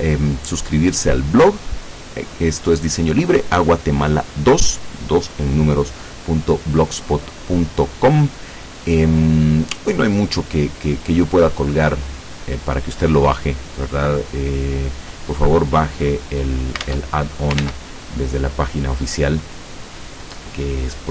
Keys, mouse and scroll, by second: 16.9 alt+Tab, 17.7 ctrl+Tab.